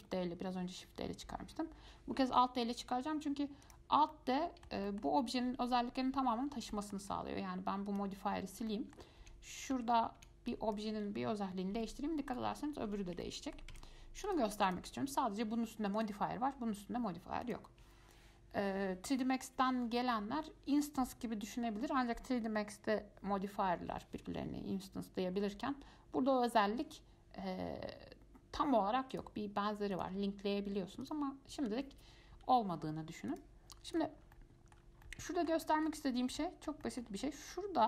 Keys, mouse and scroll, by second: 4.3-6.4 middle drag, 6.4-6.9 scroll up 4, 6.9-7.2 shift+middle drag, 7.2-8.0 scroll down 2, 8.0 scroll down 1, 8.1 click, 8.6-8.9 scroll up 2, 8.9 shift+middle click, 9.4 1, 9.9 Tab, 10.4 1, 10.7 click, 12.0 g, 13.4 middle click, 13.9 Tab, 14.5 click, 14.9 click, 16.2 click, 17.6 click, 29.3 click, 30.1 click, 31.2 click, 33.5 click, 34.1 click, 34.5 alt+middle click, 35.2-36.3 middle drag, 36.3 scroll up 3, 36.6-37.8 middle drag.